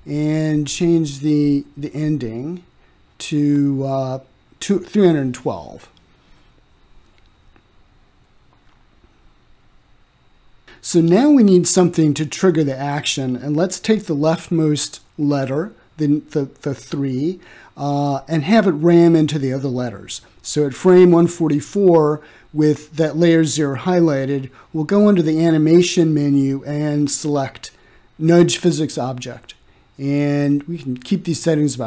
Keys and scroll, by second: 7.4-8.3 typing, 9.5 Return.